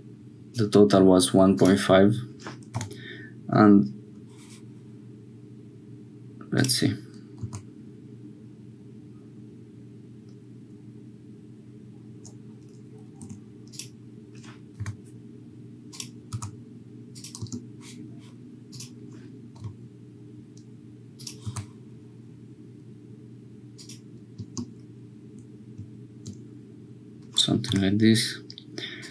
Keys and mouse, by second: 2.7 k, 13.2 1, 13.7 click, 14.8 k, 18.7 click, 19.6 k, 27.6 k.